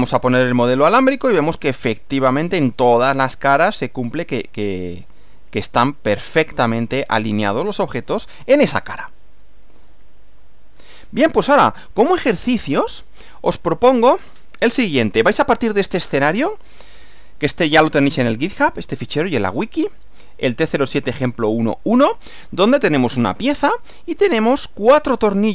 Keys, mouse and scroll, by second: 0.1 click, 0.9-8.0 middle drag, 8.9 click, 10.0 click, 12.5 click.